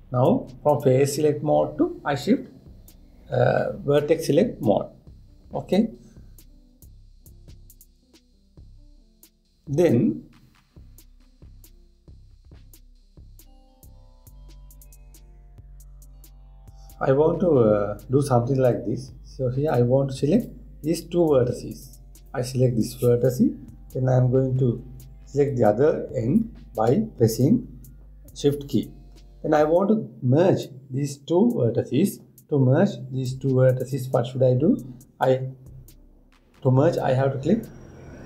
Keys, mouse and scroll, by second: 1.2-2.9 scroll up 1, 2.9-4.2 scroll up 1, 17.1 scroll down 1, 17.3 scroll up 2, 17.6 scroll down 1, 17.7-18.9 scroll up 1, 19.3-21.1 drag, 22.4 click, 26.2 shift+click, 33.3-34.9 scroll up 2.